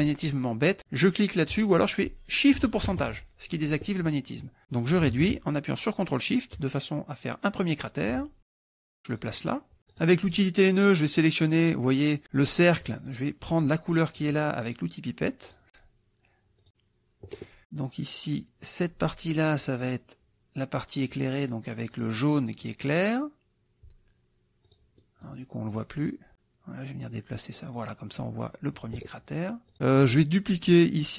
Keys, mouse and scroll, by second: 4.8-8.3 ctrl+drag, 8.4 click, 10.0 click, 11.2 click, 15.5 click, 16.6 click, 16.8 middle click, 18.4 click, 22.0 click, 22.8 click, 24.7 click, 25.0 middle click, 25.8-28.4 drag, 29.7 click, 30.4 click.